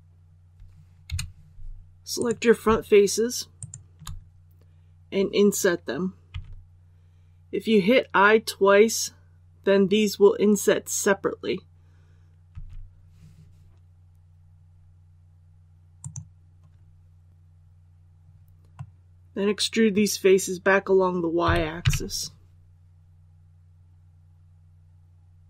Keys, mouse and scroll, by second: 1.0 3, 2.1 right click, 3.5 shift+right click, 6.2 i, 15.9 click, 17.4-17.8 scroll up 1, 18.7-19.9 middle drag, 21.4-21.7 typing.